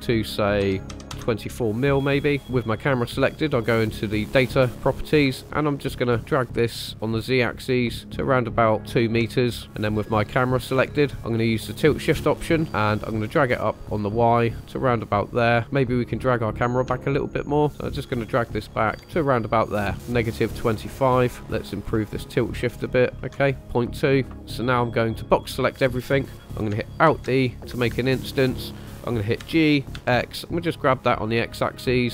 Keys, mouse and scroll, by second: 1.8 scroll down 2, 2.4 click, 5.2-9.0 ctrl+drag, 9.7 click, 12.6-15.6 shift+drag, 16.9-18.8 shift+drag, 19.5 ctrl+click, 20.7-23.3 drag, 24.4-25.5 drag, 27.2 alt+d, 27.7 Escape, 29.4 g, 30.0 x, 31.9 ctrl+click.